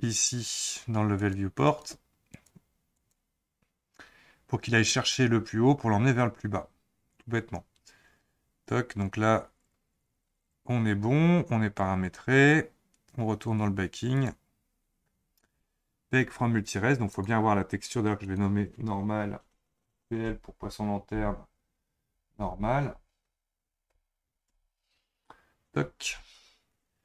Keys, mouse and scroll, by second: 1.2-6.1 drag, 8.4-9.4 scroll down 4, 9.4-10.8 scroll down 13, 10.8-12.0 scroll up 7, 12.0 click, 12.8-13.3 scroll down 8, 13.3-14.1 scroll up 2, 14.1-14.6 drag, 14.6-17.1 scroll down 7, 17.1 click, 18.2-21.3 drag.